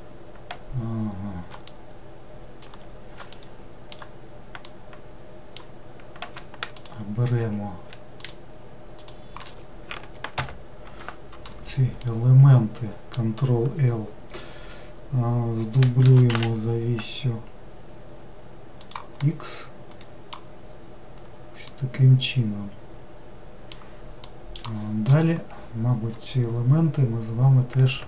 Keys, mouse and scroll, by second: 1.7-6.7 shift+middle drag, 6.7 shift+click, 8.2 shift+click, 9.0 shift+click, 10.3 ctrl+l, 12.0-15.1 middle drag, 16.1 shift+d, 19.2-20.6 middle drag, 20.6-21.7 scroll down 1, 21.7-27.3 middle drag.